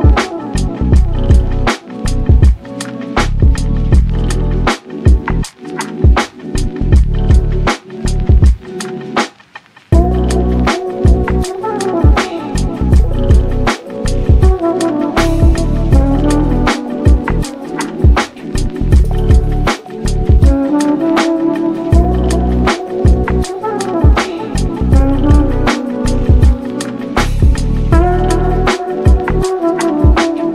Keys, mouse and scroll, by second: 0.2 g, 1.3-3.4 middle drag, 3.4 /, 3.8-4.3 middle drag, 4.3 shift+right click, 4.6 shift+a, 5.8-6.3 middle drag, 6.3 s, 7.9 KP_7, 8.8 z, 9.1-9.6 shift+middle drag, 9.6 s, 10.9 s, 12.4 s, 13.9 g, 15.3 g, 15.9-16.9 middle drag, 16.9 z, 17.4-17.9 middle drag, 17.9 Tab, 18.1 e, 18.9 Tab, 19.8 KP_3, 20.4 s, 22.3-23.5 middle drag, 23.5 /, 24.4-24.8 scroll up 1, 24.8 s, 25.8-26.5 scroll down 2, 26.0-26.3 middle drag, 26.5 shift+middle click, 27.2-28.7 drag, 30.1 click.